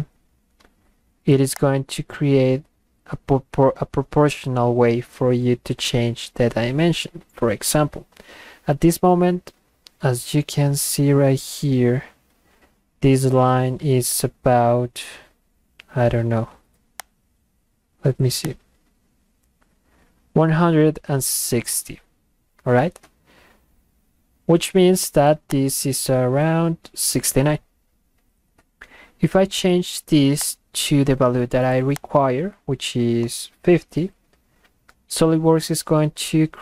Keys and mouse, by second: 1.5 click, 17.0 click, 18.4 click, 23.2 Escape, 25.5 click, 28.8 Escape, 30.4 click, 32.0 click.